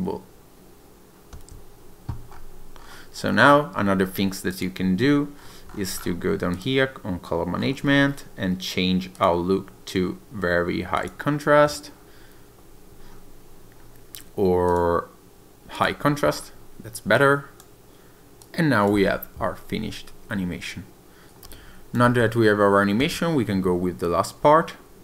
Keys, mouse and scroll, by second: 1.4 space, 2.4 scroll up 2, 2.8 scroll down 2, 4.5 click, 5.4-6.1 scroll down 6, 6.6 click, 7.7-8.2 scroll down 4, 9.2 click, 14.7 click, 17.2 click, 18.5 click, 19.0 space, 21.3 click, 22.1 space, 23.0 space.